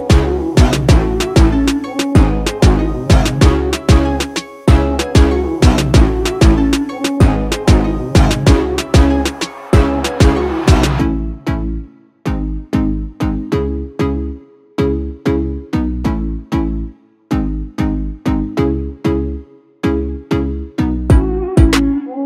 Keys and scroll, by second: 6.4-13.1 typing, 16.0-16.8 typing, 18.7-21.1 typing.